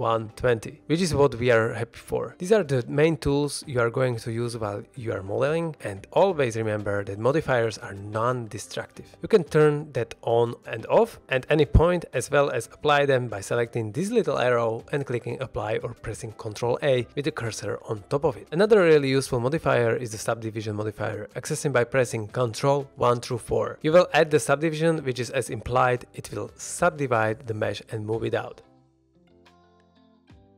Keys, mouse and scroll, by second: 0.3 shift+middle drag, 0.7 scroll down 1, 0.8-1.2 middle drag, 1.2-1.6 scroll up 1, 7.8 click, 8.8 click, 9.6 middle drag, 10.1 ctrl+z, 13.1-14.9 drag, 15.0 click, 17.4 ctrl+a, 18.4 ctrl+z, 19.0 shift+middle click, 20.2 click, 20.4-20.7 middle drag, 24.5 ctrl+2, 25.6-25.9 middle drag, 26.2-27.5 scroll up 2, 28.0 scroll down 1, 29.0-29.3 middle drag, 29.8-30.5 middle drag.